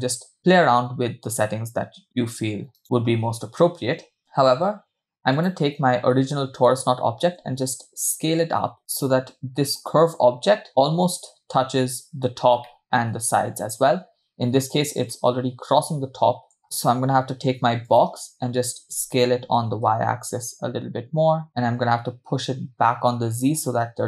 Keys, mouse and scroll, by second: 5.3 click, 7.6 s, 8.8-11.1 middle drag, 12.7-15.0 middle drag, 15.2-16.6 middle drag, 16.6 KP_0, 17.9 click, 18.9 s, 21.5 g.